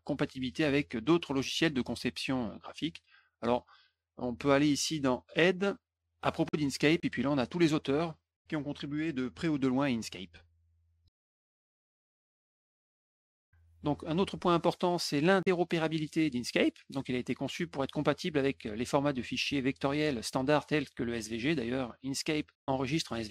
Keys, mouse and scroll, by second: 5.2 click, 6.4 click, 7.4 click, 8.9-9.5 scroll down 4, 9.6-12.2 scroll up 15, 13.1 click.